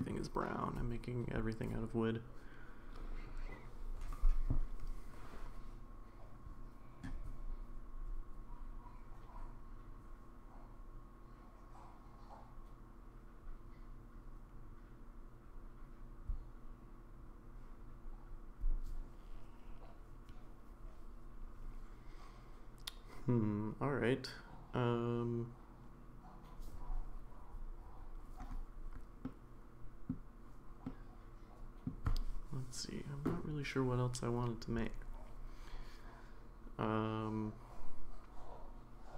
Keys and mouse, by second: 29.2-30.1 middle drag, 30.9-31.9 middle drag.